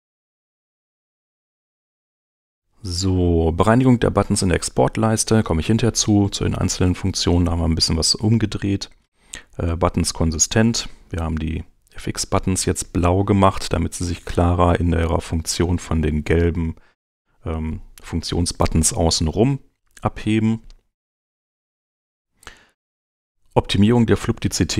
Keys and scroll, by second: 11.2 super+Tab, 20.2 super+Tab.